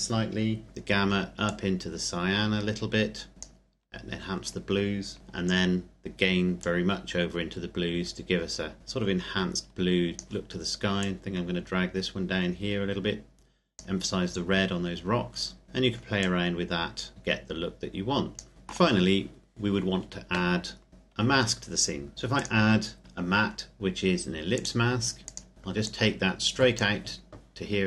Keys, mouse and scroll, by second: 1.4 click, 6.6 click, 15.5 scroll down 1, 15.6-16.2 scroll up 1, 16.2 click, 18.5 shift+middle click, 20.9 click, 22.3 click, 24.5 click, 25.9 click.